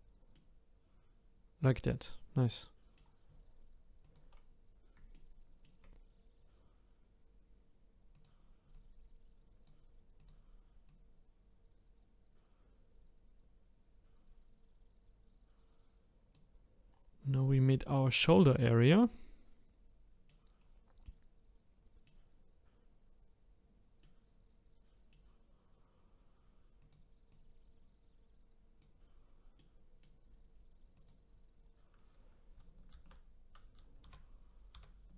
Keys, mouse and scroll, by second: 0.3-3.4 middle drag, 4.0 click, 4.6-5.1 scroll up 1, 5.1-8.1 shift+middle drag, 8.1 click, 8.7 click, 10.2 click, 10.9 click, 16.9-18.6 scroll down 1, 18.6-20.6 middle drag, 20.6-21.0 scroll up 3, 21.0-25.4 middle drag, 25.4-26.8 scroll up 5, 26.8 click, 27.3 click, 29.6-30.9 middle drag, 30.9 click, 31.6-32.9 scroll down 4, 32.9 ctrl+t, 34.0 ctrl+z, 34.7 ctrl+z.